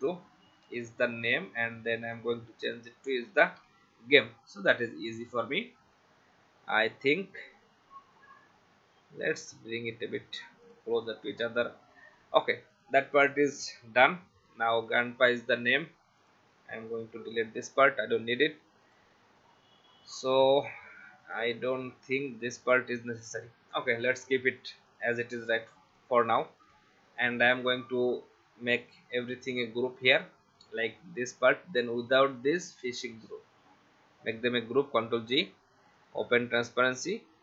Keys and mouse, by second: 1.3 click, 3.0-4.2 typing, 5.2 click, 10.6 click, 12.7 click, 16.2 click, 16.9 Delete, 18.8 click, 21.3 click, 23.3 click, 24.7 click, 26.2 click, 28.9 click, 32.8 shift+click, 34.2 ctrl+g, 35.8 click.